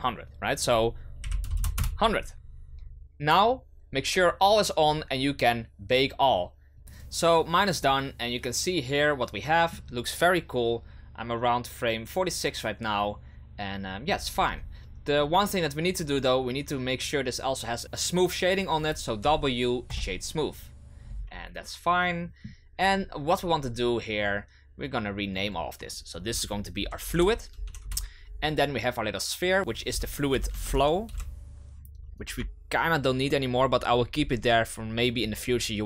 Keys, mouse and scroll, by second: 0.5-1.5 drag, 1.5 KP_0, 6.8 right click, 6.9 click, 7.8-10.8 middle drag, 13.1-14.3 middle drag, 14.3-15.0 scroll up 5, 15.0-15.9 scroll up 2, 15.9 right click, 19.2 w, 21.0-21.6 scroll down 6, 21.6-24.7 middle drag, 25.3 click, 25.4-28.4 drag, 29.6-31.1 drag.